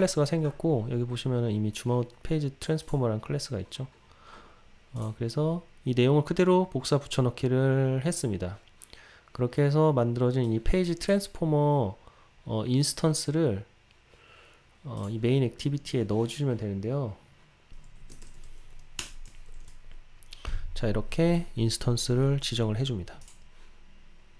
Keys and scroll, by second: 19.1 Return, 23.3 ctrl+r.